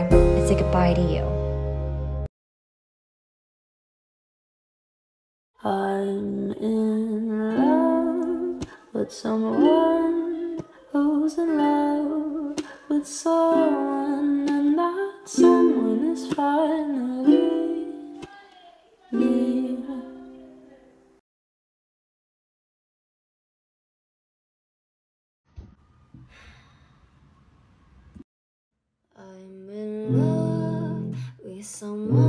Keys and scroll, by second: 21.8 space, 25.0 space.